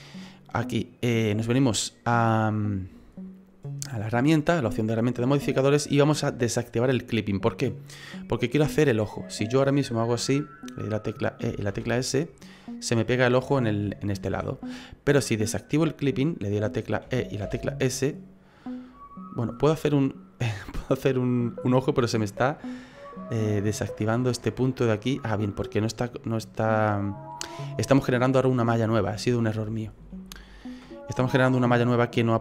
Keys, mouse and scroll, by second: 4.2 click, 11.4 e, 14.3 ctrl+z, 15.4 click, 17.0 e, 19.6 middle click, 22.0-22.6 scroll up 3, 22.4 middle click, 24.6 right click, 25.5 right click, 26.2 right click, 26.7 middle click, 28.0-28.8 scroll down 4, 29.0 ctrl+z, 29.6 ctrl+z, 30.0 ctrl+z, 30.3 ctrl+z.